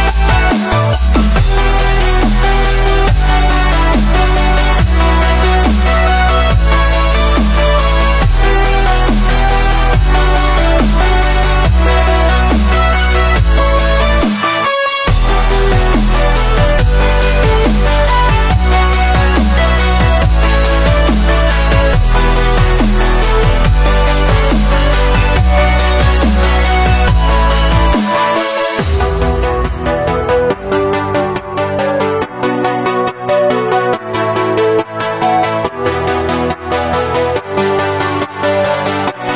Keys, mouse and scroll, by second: 1.0 ctrl+r, 5.2 3, 5.5 click, 5.9 shift+click, 6.3 i, 8.3-9.5 scroll up 5, 9.5-10.4 ctrl+middle drag, 10.4-10.7 scroll up 1, 12.6-14.3 middle drag, 14.3 ctrl+z, 14.8 ctrl+r, 16.7 click, 17.3 3, 17.5 click, 17.8 shift+click, 18.6 i, 21.2-22.7 middle drag, 22.7 i, 23.5 e, 26.2 scroll down 1, 26.3-27.8 middle drag, 27.8 ctrl+r, 29.4-29.8 scroll up 1, 29.8 ctrl+r, 31.1 middle click, 31.8-32.1 scroll up 4, 32.1-33.3 shift+middle drag, 33.3 ctrl+r, 35.7-36.0 scroll down 3, 36.0-36.7 middle drag, 36.7-38.0 scroll up 3, 38.0 scroll up 1, 38.1 3, 38.4 click, 38.9 shift+click, 39.1 shift+click.